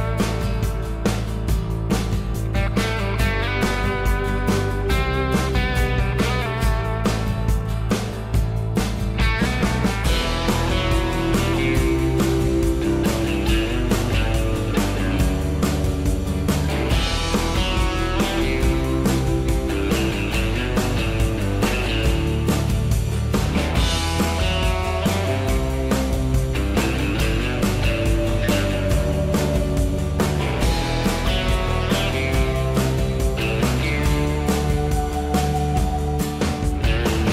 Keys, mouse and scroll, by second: 22.3 m, 28.1 o, 28.1 m.